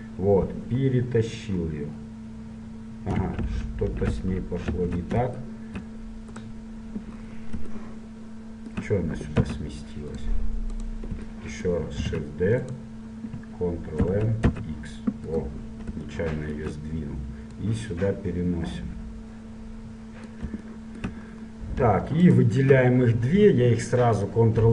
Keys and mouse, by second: 7.4-9.6 middle drag, 9.6 x, 11.0-12.5 right drag, 12.2 shift+d, 14.2 ctrl+m, 17.8 click, 17.9-19.4 right drag, 19.4 click, 20.9-22.4 middle drag, 22.4-24.2 right drag, 24.6 ctrl+j.